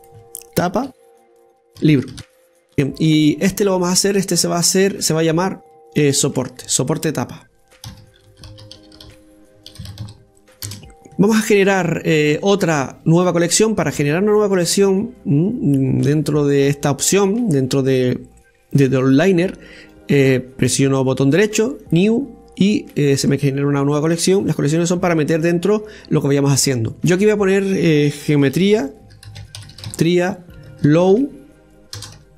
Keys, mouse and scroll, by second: 0.7-3.2 drag, 4.6 right click, 5.5 right click, 5.8 right click, 6.1 right click, 7.2 click, 7.7 click, 7.8-10.9 drag, 13.3-16.3 right drag, 20.6-23.6 right drag, 27.9-32.3 drag.